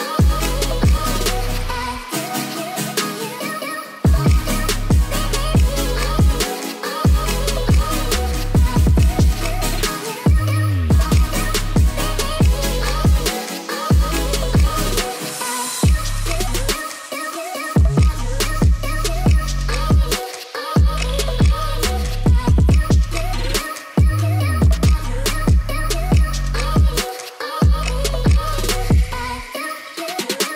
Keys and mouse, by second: 0.9 Tab, 2.0 Tab, 2.9-4.2 drag, 7.6 Tab, 8.0 Tab, 8.2 click, 11.0 ctrl+s, 11.6 KP_0, 12.8 shift+middle drag, 15.0 click, 15.4 shift+middle drag, 16.0 KP_Decimal, 16.6 middle click, 17.4-18.7 drag, 19.8 click, 20.4 click, 20.7-22.2 drag, 23.4 click, 24.9-26.1 drag, 26.6 middle click, 27.2-27.6 middle drag, 27.6 click, 27.8 middle click, 28.1 shift+a, 30.2 click.